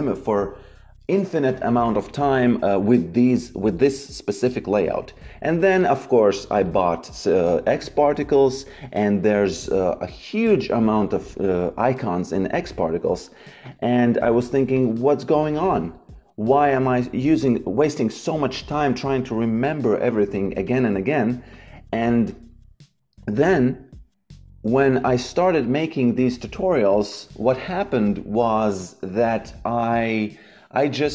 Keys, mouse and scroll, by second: 5.5 click, 13.6 click, 20.6 click, 25.6 click, 28.0 click, 29.0 Delete.